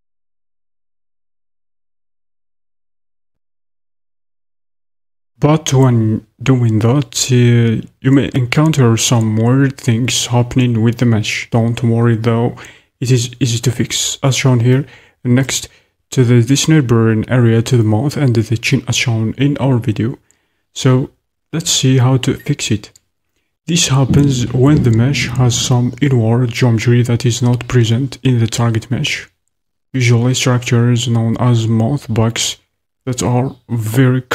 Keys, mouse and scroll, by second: 3.3-34.3 shift+drag.